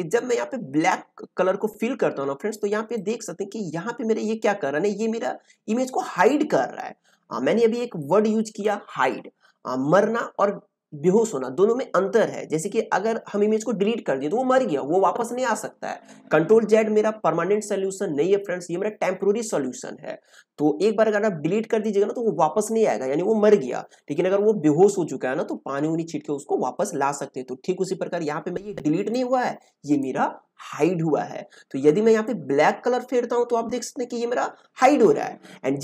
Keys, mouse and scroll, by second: 2.9-29.1 drag, 29.1-32.2 drag, 32.2-35.8 drag.